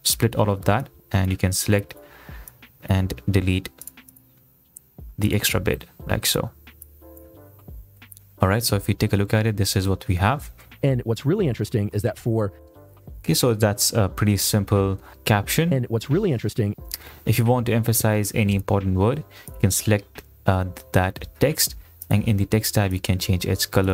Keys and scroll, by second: 8.2 Delete, 10.6 space, 13.1 space, 15.8 space.